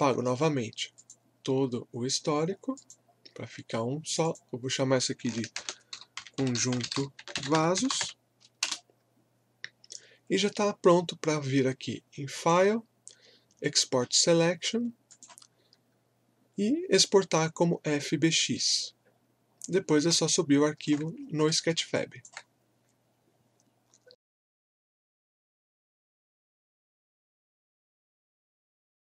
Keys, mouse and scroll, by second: 5.3-8.5 typing, 8.6 Return, 12.3 click, 15.1 click, 19.9 scroll down 1, 20.3 alt+click, 21.1 scroll up 1, 21.5 alt+middle click, 22.0 alt+click.